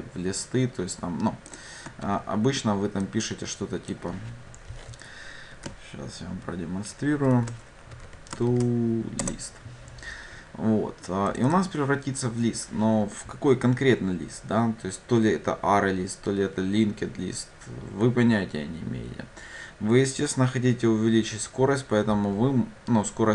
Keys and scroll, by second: 2.2 ctrl+d, 9.3 Return.